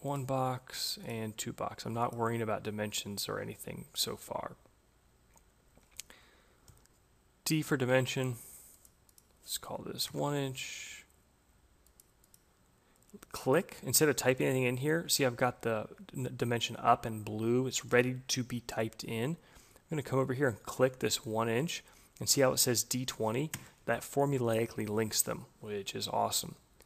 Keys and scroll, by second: 6.0 d, 9.9 Return, 22.9 Return.